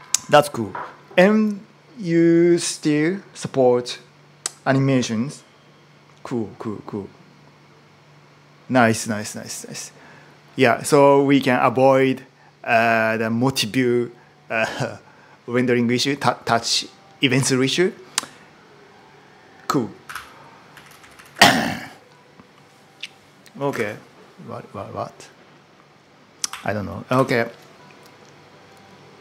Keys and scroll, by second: 19.6-21.6 typing, 23.1-23.8 typing, 26.1-27.1 typing.